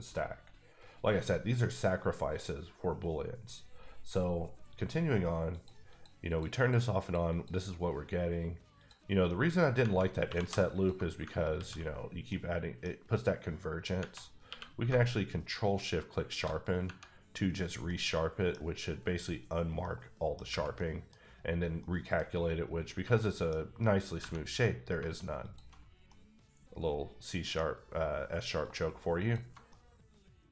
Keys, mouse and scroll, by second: 5.5 click, 5.9 click, 6.5 double click, 7.0 click, 7.3 click, 9.1 click, 9.2 middle click, 9.7 scroll up 1, 10.2 2, 10.7 alt+click, 11.5 ctrl+x, 12.0-12.3 scroll down 1, 12.3 middle click, 14.0 Tab, 14.4 q, 16.1 shift+click, 16.8 Tab, 17.6 scroll down 1, 17.8 middle click, 19.8 middle click, 20.7 middle click, 21.8 middle click, 23.1 middle click, 23.6-24.1 scroll up 2, 25.4 alt+click, 25.8 scroll down 2, 26.0 middle click, 26.8 middle click, 28.6 alt+click, 29.2 alt+double click, 30.0-30.5 middle drag.